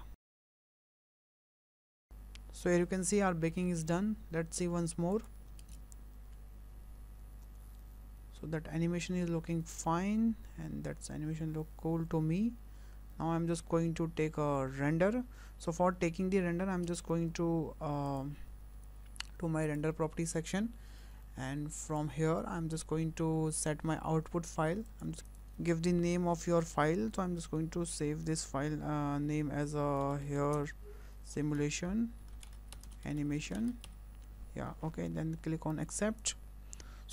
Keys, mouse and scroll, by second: 5.1 click, 5.6 space, 16.9 space, 18.1 click, 19.7 click, 21.9 click, 24.9 click.